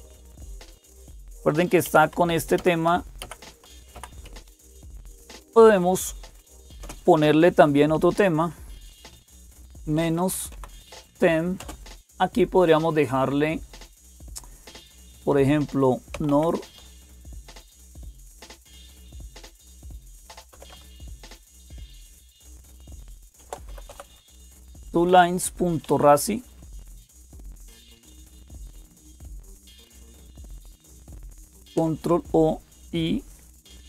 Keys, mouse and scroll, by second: 0.0-33.8 typing, 1.6 Down, 1.9 Up, 2.4 Down, 2.7 Up, 3.0 Down, 3.4 Up, 4.0 Down, 4.7 Up, 10.0 Escape, 30.8 ctrl+o, 31.6 Return.